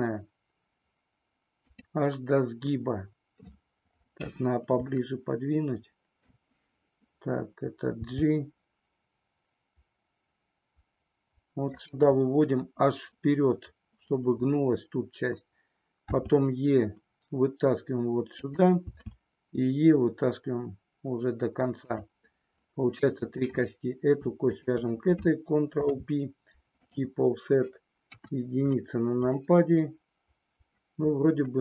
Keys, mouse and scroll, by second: 1.7 click, 5.0-6.4 shift+middle drag, 7.9 g, 11.7 click, 16.0 e, 18.4 click, 18.9 e, 21.9 click, 23.4 click, 24.5 shift+click, 25.8 ctrl+p, 28.0 KP_1, 29.3-31.6 middle drag.